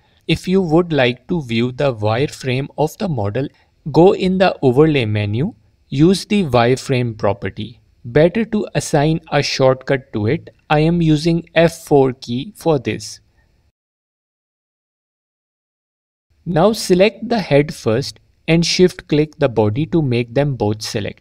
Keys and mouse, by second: 1.1 F4, 4.1-7.9 drag, 8.5 F4, 8.9 F4, 9.9 click, 10.3 alt+click, 13.0 click, 13.9 F4, 14.6 alt+click, 17.2 click, 18.7 shift+click.